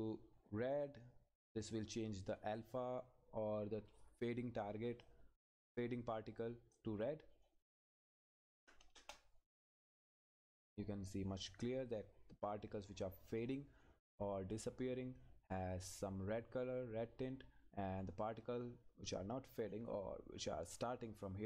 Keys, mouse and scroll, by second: 5.0 click, 5.7-6.8 scroll up 1, 6.8 click, 9.0 Return, 9.6 click, 10.4 scroll down 1, 12.9 scroll up 1, 16.9-17.3 scroll down 1, 19.2 scroll up 1.